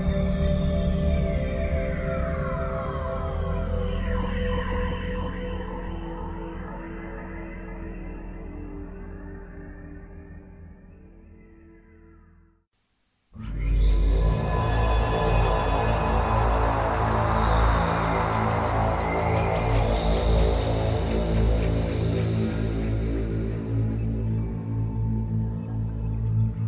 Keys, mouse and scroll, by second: 1.2 click, 1.6 click, 3.7 click, 9.1 Escape, 11.1 e, 11.5 click, 13.3 click, 17.5 Escape, 18.3 click.